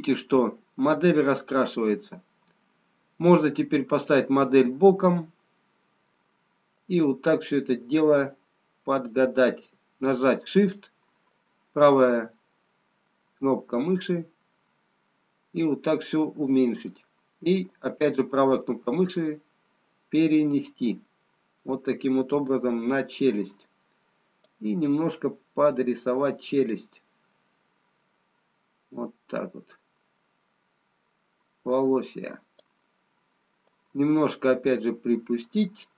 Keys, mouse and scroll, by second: 13.0 shift+right click, 19.5 right click, 26.7 click, 34.5 right click.